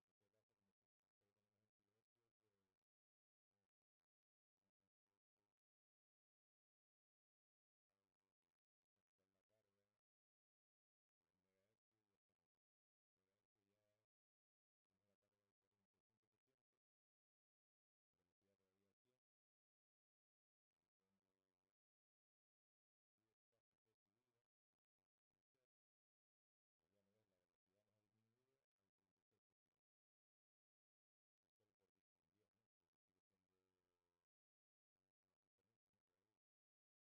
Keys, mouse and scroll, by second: 0.4-1.7 drag, 1.9 click, 3.8 click, 5.0 0, 5.1 0, 5.9 Return, 8.1 click, 8.9 0, 9.4 Return, 12.3 click, 16.4-18.0 drag, 20.4 click, 21.8 1, 22.4 Return, 24.0 click, 24.5 click, 36.8 click.